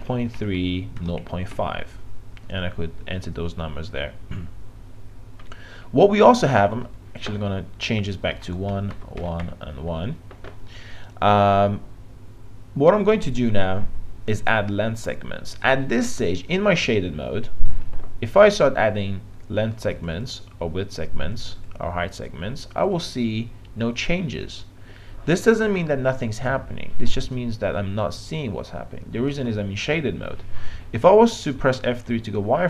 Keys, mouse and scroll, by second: 6.9 click, 8.4 Tab, 8.7 KP_1, 8.9 Tab, 9.2 KP_1, 9.5 Tab, 19.9-24.2 drag, 32.1 F3.